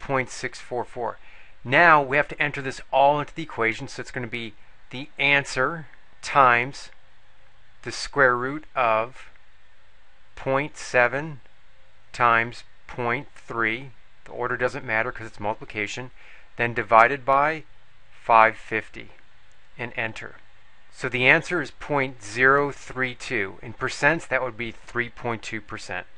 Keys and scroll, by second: 10.3 ., 11.1 7, 12.9 ., 13.7 3, 18.0 5, 18.5 5, 19.0 0, 19.7 Return.